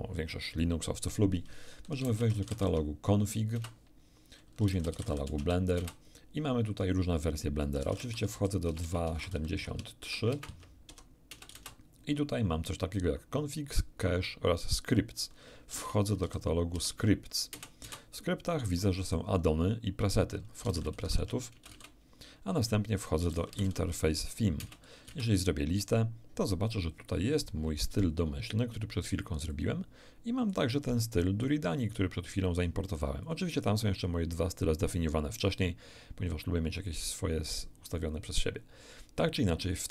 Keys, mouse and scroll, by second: 1.9-2.6 typing, 2.6 Tab, 3.5 Return, 4.6-5.7 typing, 5.3 Tab, 5.4 Return, 7.7-11.5 typing, 11.3 Return, 11.5 Return, 15.7-16.2 typing, 16.7 Tab, 17.5 Return, 17.8 l, 20.6-21.7 typing, 21.1 Tab, 21.5 Return, 23.3 typing, 23.7 Tab, 25.1 Return, 25.1 l, 29.5 click, 31.4-32.9 drag, 33.2 click.